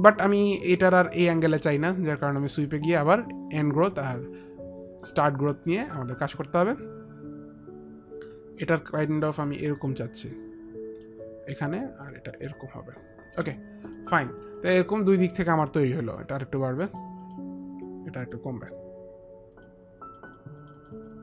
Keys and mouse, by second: 2.9 click, 3.3 click, 3.8 click, 11.7 click, 14.7 alt+click, 17.0 alt+click, 17.3 alt+click, 18.4 alt+click, 18.9 click, 19.7 click.